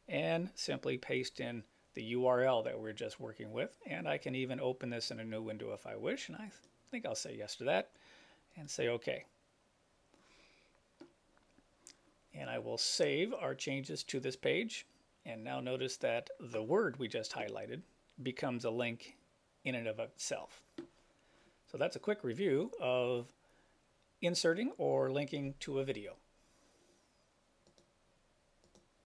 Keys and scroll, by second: 1.3 super+v.